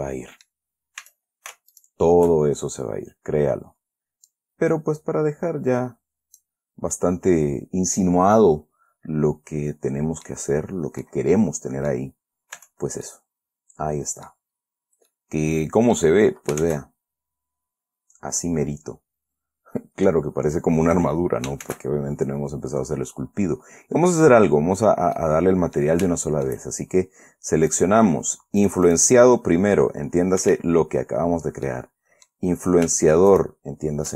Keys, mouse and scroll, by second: 1.4 a, 2.1 alt+shift+right click, 4.6-6.9 drag, 6.9-7.3 scroll down 2, 7.3-10.8 middle drag, 10.8-11.4 scroll up 2, 11.4-12.4 middle drag, 12.6 scroll up 2, 12.9 Tab, 13.4-14.8 middle drag, 15.4-16.5 middle drag, 17.0 shift+z, 18.1-18.6 scroll up 2, 19.3 scroll down 2, 22.0 shift+z, 25.5 middle click, 26.4 shift+middle click, 26.5-27.4 shift+scroll down 3, 27.4-28.1 scroll down 1, 28.1 right click, 29.0 right click, 30.8 Escape, 31.3-31.7 scroll up 1, 32.0-33.2 middle drag, 33.7 shift+right click.